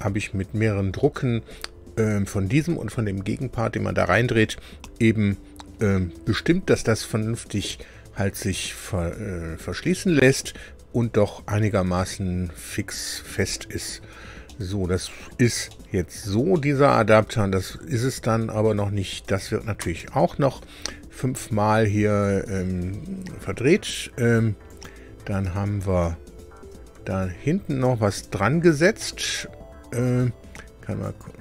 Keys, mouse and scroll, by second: 14.4-15.4 drag, 15.6 shift+click, 15.7 shift+middle click, 16.5 shift+middle click, 19.2 click, 19.8 space, 24.6 click, 25.4 space, 26.5 space, 26.9 space, 27.6 space, 28.0 space, 29.0-30.1 middle drag, 31.0 click.